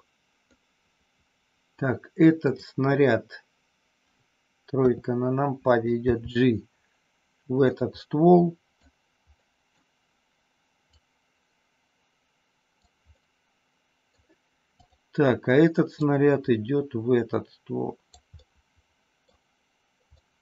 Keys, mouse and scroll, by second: 0.5-1.7 middle drag, 2.4 click, 4.7 KP_3, 6.1 g, 7.6 click, 7.9 scroll up 1, 8.1 middle click, 9.4 scroll up 1, 9.5 middle click, 10.9-12.9 drag, 13.1-14.1 middle drag, 14.7 click, 15.9-18.1 drag, 18.2 scroll up 1, 18.4 middle click, 20.1-20.4 middle drag.